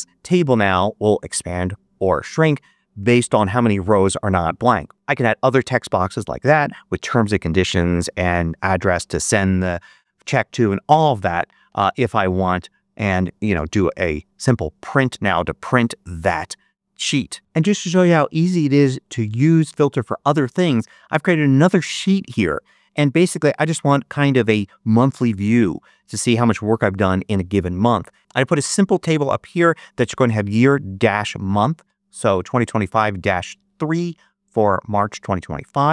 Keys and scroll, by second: 11.6 BackSpace, 13.5 super+p.